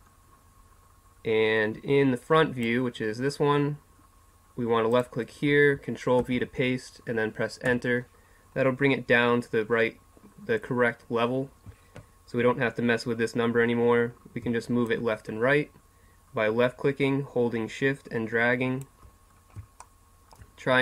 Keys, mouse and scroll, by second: 14.9-16.5 drag, 16.7 click, 19.3 middle click.